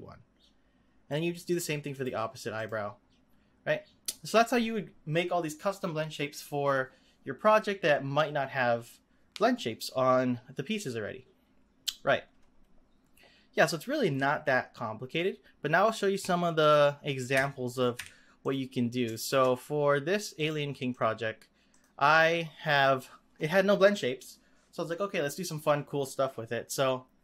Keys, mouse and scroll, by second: 1.9 click, 2.5 click, 16.6 click, 17.3 x, 17.7 click, 17.9 x, 18.4 click, 19.2 shift+click, 20.3 click, 20.8 click, 21.7 click.